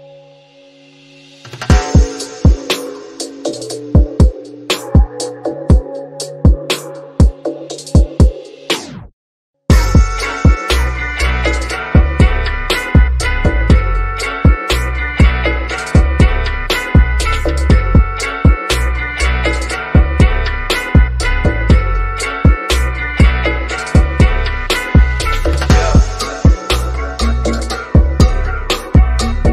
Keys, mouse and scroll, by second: 1.5 click, 9.1 shift+click, 13.4 click, 15.8 click, 16.6-18.0 scroll down 1, 18.1-19.4 drag, 22.1 shift+click, 27.5 click.